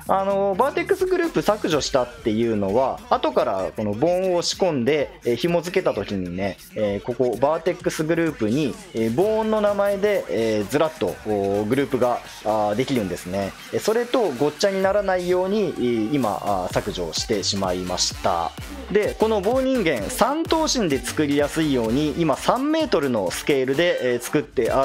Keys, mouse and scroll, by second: 0.0-18.6 drag.